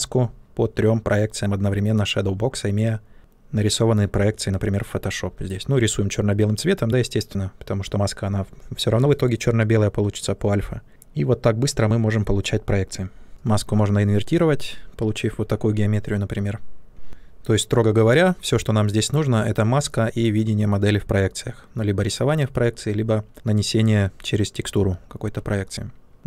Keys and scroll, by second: 25.2 ctrl+z.